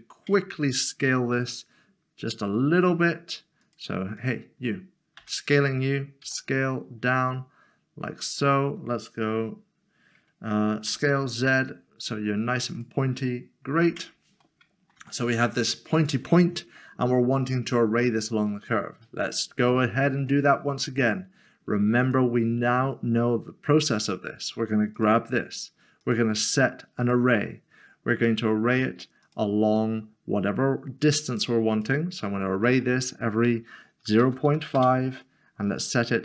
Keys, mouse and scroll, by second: 0.3 click, 1.3 a, 2.9 Tab, 3.4 a, 3.6 click, 6.2 s, 8.4 click, 10.9 s, 11.1 z, 12.8 click, 13.9 Tab, 14.4 Tab, 14.6 middle click, 15.2 shift+middle click, 15.9 shift+middle click, 16.8 click, 17.0 middle click, 18.5 scroll up 1, 19.0 middle click, 19.7 shift+middle click, 20.5 scroll down 1, 25.0 click, 29.2 click, 31.3 click, 31.7 double click, 32.6 click, 34.1-34.5 typing, 34.8 Return.